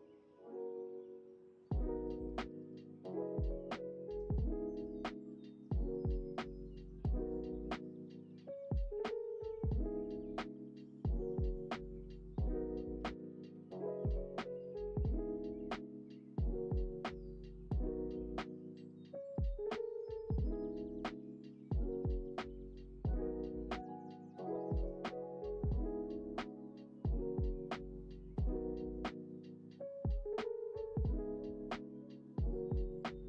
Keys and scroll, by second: 4.7 alt+x, 18.1 Delete, 28.4 ctrl+s, 31.6 ctrl+s.